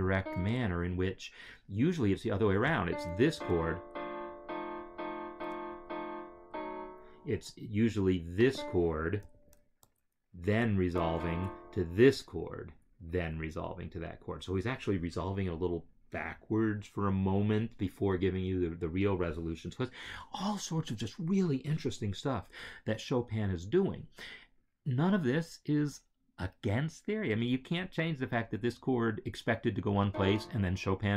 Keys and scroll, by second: 3.2 Right, 3.7 Left, 4.8 Left, 5.7 Left, 6.4 Left, 9.3 shift+Right, 9.8 shift+Left, 10.7 Left, 11.4 shift+Right, 29.9 shift+Right.